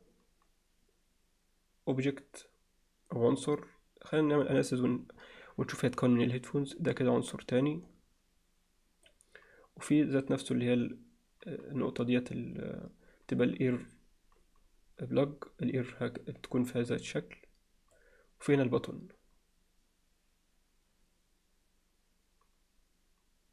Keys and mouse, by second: 0.0-4.3 drag, 6.7-9.1 drag, 10.0-18.0 drag, 18.5-23.5 drag.